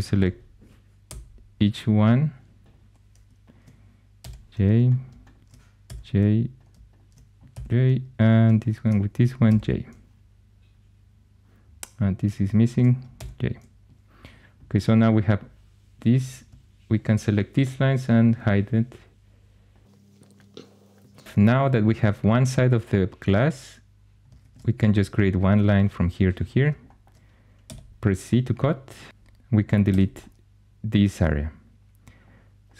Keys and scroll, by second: 0.1 k, 0.9 j, 4.1 j, 5.7 j, 7.4 j, 9.4 j, 13.0 j, 24.3 shift+a, 27.5 c, 29.8 x.